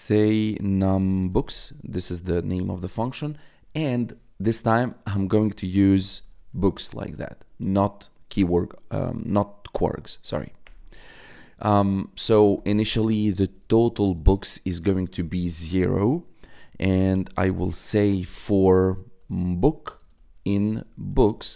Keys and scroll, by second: 0.4-3.5 typing, 4.8-7.8 typing, 10.5 Return, 10.8 Tab, 12.0-14.5 typing, 14.9 Return, 15.3 Tab, 16.4-17.4 typing, 19.1-21.5 typing.